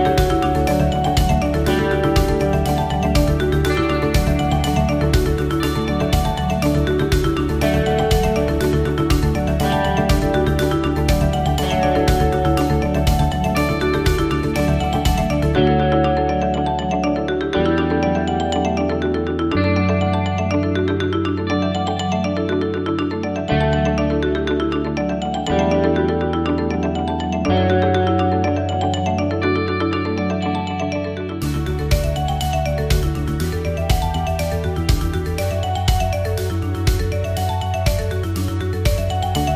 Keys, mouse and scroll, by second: 2.9 click, 6.9 scroll down 1, 8.0-8.3 scroll down 1, 9.0 click, 15.1 click, 18.0 click, 22.9 click, 25.7 middle click, 26.7 scroll up 1, 27.3 shift+middle click, 28.0-28.3 scroll up 2, 29.3 shift+middle click, 30.2 scroll up 1, 32.1 middle click, 34.2 click, 37.9 scroll up 2, 38.5 shift+middle click.